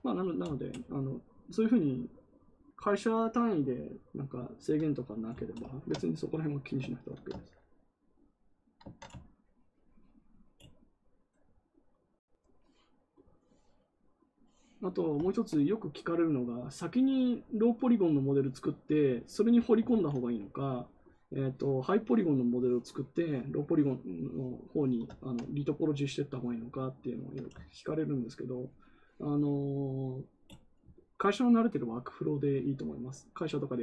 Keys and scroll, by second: 19.8 ctrl+z.